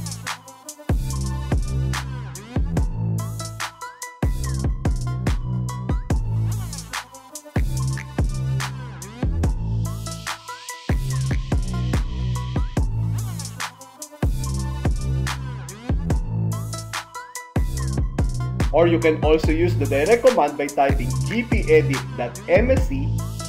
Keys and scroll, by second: 1.1 Return, 2.9 Return, 5.6 End, 13.3 shift+F10, 15.3 s.